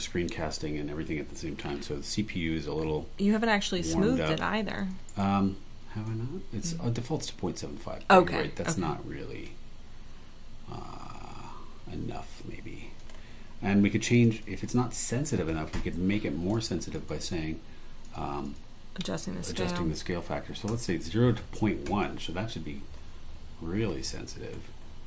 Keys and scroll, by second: 5.1 super+e, 17.2 super+e, 20.7 i.